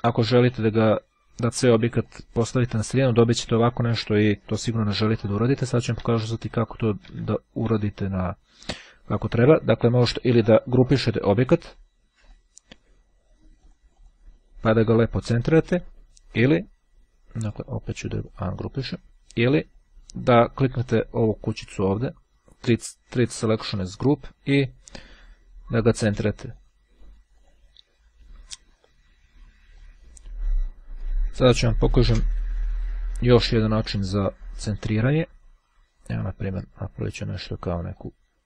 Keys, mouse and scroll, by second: 0.1-1.1 drag, 1.6-3.1 drag, 5.5 ctrl+z, 11.4 click, 12.3 click, 13.7-14.7 drag, 18.0-19.4 drag, 22.2-24.3 drag, 24.5-25.9 drag, 26.3-27.3 drag, 27.6 click, 29.9-31.1 drag, 32.5 Delete, 33.4 click, 34.5-37.7 drag, 38.0 click.